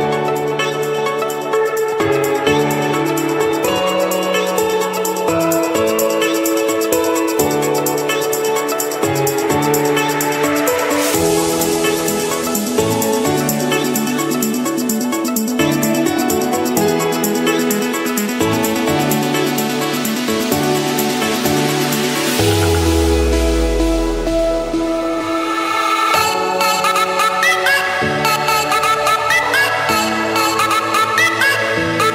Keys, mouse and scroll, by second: 0.5 click, 1.0 click, 2.1 click, 2.4 click, 4.4-4.9 scroll up 2, 5.5 click, 5.9 click, 6.2-6.9 scroll down 2, 7.4-8.3 scroll up 2, 8.3 click, 9.5 click, 9.9-10.5 scroll down 3, 11.8-12.8 scroll up 2, 13.2 click, 13.7 click, 14.9-15.9 scroll down 1, 16.0 click, 17.0 click, 17.2-17.5 scroll down 1, 17.5 Return, 17.5-17.8 scroll, 18.5 click, 19.4 click, 20.3 j, 20.8 Return, 22.1 click, 22.3 click, 23.4-23.8 typing, 24.3 Return, 25.6 click, 26.9 click, 27.8 Escape, 28.7 Escape, 29.2 click, 31.9 click.